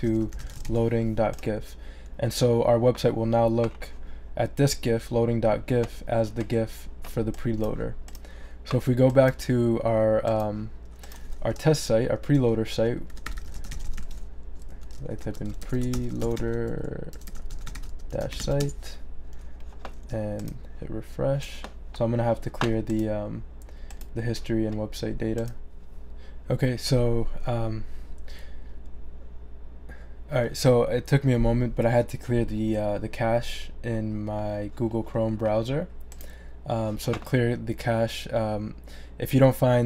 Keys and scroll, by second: 12.8-18.9 typing, 14.5 Right.